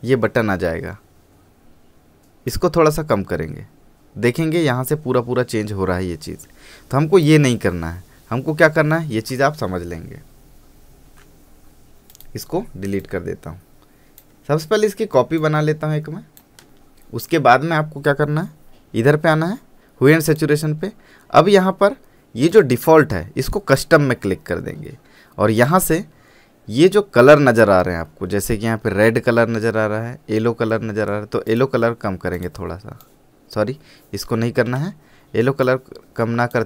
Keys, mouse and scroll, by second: 2.7-11.2 drag, 11.2 ctrl+z, 12.3-16.7 drag, 20.4 click, 22.7 click, 31.6-36.6 drag.